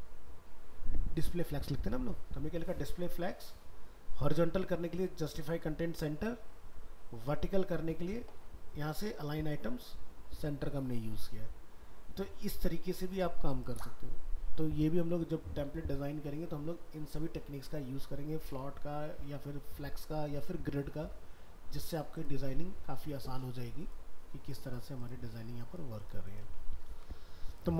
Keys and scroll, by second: 26.9 ctrl+w.